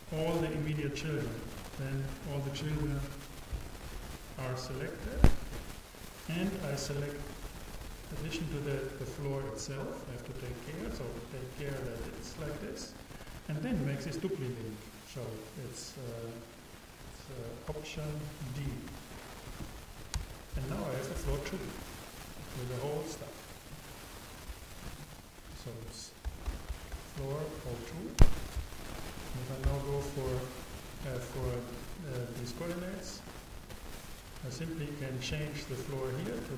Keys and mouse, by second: 7.2-8.8 drag, 18.7 alt+d, 22.4-26.8 drag, 26.8 o, 29.6 n, 31.9-34.6 drag.